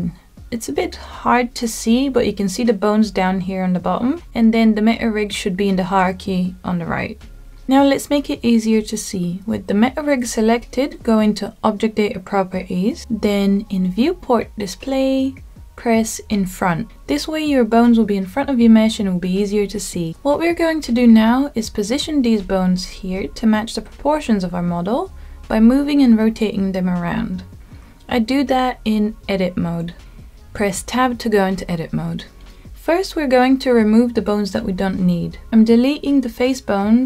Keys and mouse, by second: 0.6 middle click, 1.8-2.4 middle drag, 2.8 click, 10.3 click, 11.2 click, 13.7 click, 15.2-17.9 middle drag, 18.7-19.1 shift+drag, 19.1 shift+middle click, 23.7 middle click, 24.8-25.6 middle drag, 27.1 KP_1, 30.0 shift+middle click, 31.7 Tab, 35.8 shift+middle click, 36.9-37.0 middle drag.